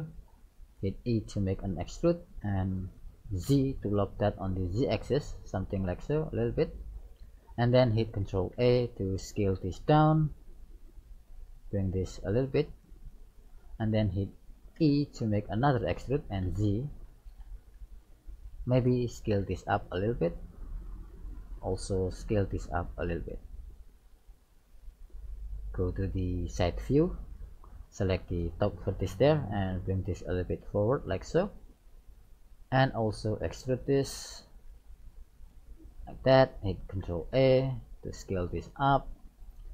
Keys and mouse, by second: 0.1-2.1 middle drag, 1.1 e, 8.5 ctrl+a, 11.9-13.6 drag, 14.8 e, 19.5 ctrl+a, 21.9 right click, 22.8 ctrl+a, 26.5 KP_3, 28.5 right click, 29.4 middle click, 30.2-31.3 drag, 30.2 right click, 33.5 e, 37.0 ctrl+a.